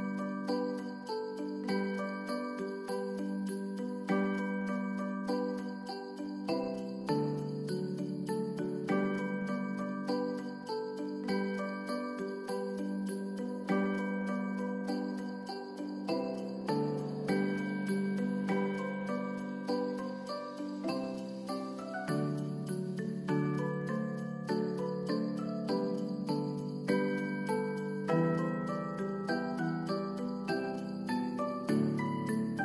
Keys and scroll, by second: 0.1 ctrl+d, 23.2 ctrl+s.